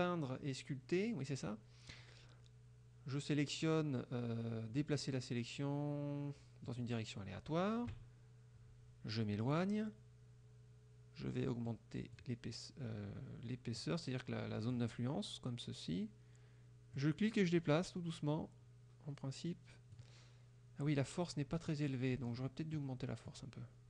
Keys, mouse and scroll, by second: 6.8 click, 8.0 KP_Subtract, 9.4 click, 11.8 click, 13.9 click, 17.0-20.2 drag, 22.9 click.